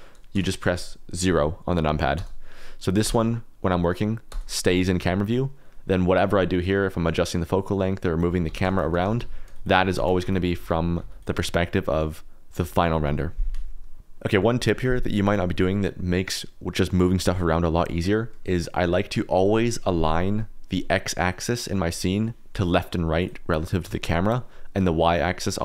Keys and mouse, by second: 0.3 KP_0, 2.1 KP_0, 3.0 KP_0, 3.7 middle click, 4.2 KP_0, 5.1 middle click, 6.6-8.2 drag, 8.4-11.0 typing, 11.1 click, 15.8 middle click, 18.2 click, 18.2 middle click, 23.1 click, 23.8 r, 24.0 z.